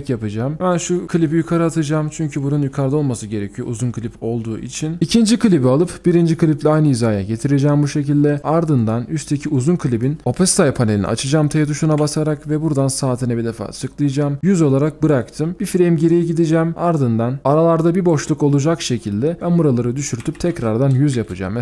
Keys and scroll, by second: 12.0 typing, 17.0-19.1 alt+scroll up 1, 20.3-21.0 typing, 21.2 Return.